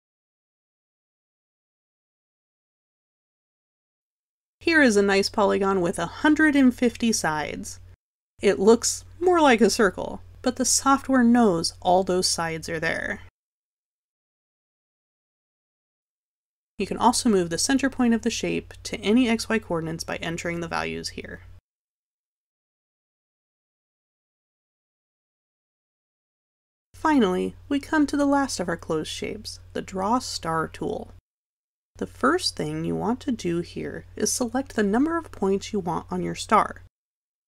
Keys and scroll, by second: 1.0 1, 20.5 0.